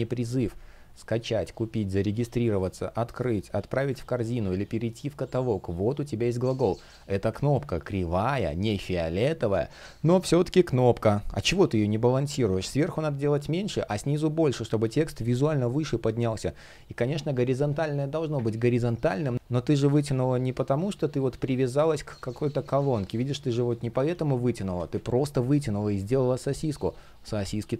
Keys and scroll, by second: 0.6 space, 2.9 space, 5.6 space, 7.5 shift+o, 21.5 shift+p, 24.2 super+z, 25.1 super+z.